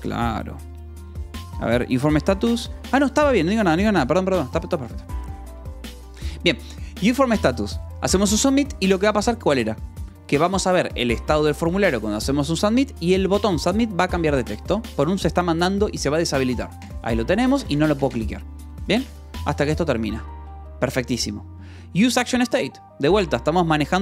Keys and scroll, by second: 0.4 l, 1.5 j.